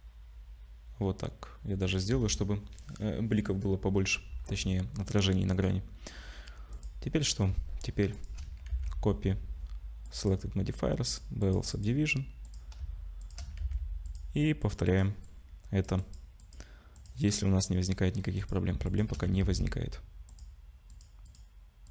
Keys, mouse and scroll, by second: 3.9-6.1 scroll down 2, 6.1 scroll down 1, 6.7 click, 6.7 scroll up 1, 8.1 shift+click, 8.7 ctrl+c, 12.4 click, 13.2 shift+click, 13.6 ctrl+c, 16.9 click, 17.7-18.1 scroll up 2, 18.1 scroll down 1, 18.4 click, 18.9 shift+click, 19.4 ctrl+c.